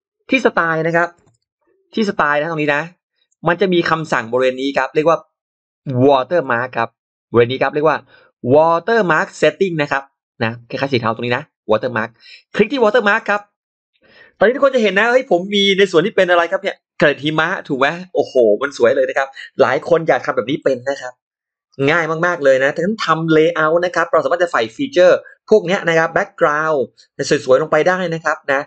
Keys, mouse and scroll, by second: 1.3 shift+x, 1.8-3.1 shift+drag, 3.7-5.9 shift+drag, 5.6 shift+x, 6.2 shift+right click, 6.3-8.1 shift+right drag, 6.3 shift+x, 13.0 click.